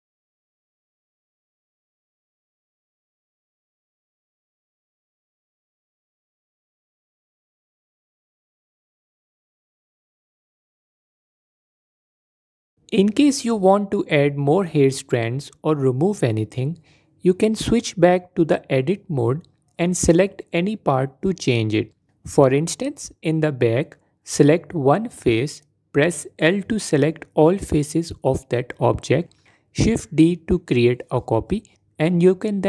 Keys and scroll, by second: 7.2 f, 8.9 f, 14.8 Tab, 18.5 Tab, 24.7 l, 25.5 shift+d, 27.9 s, 28.9 ctrl+z.